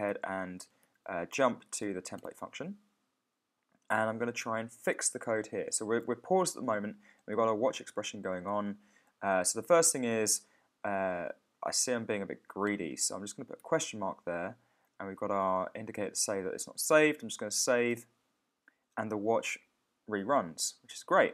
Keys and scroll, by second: 0.1 ctrl+super+o, 0.8 shift+super+o, 2.1 Return, 17.9 super+s.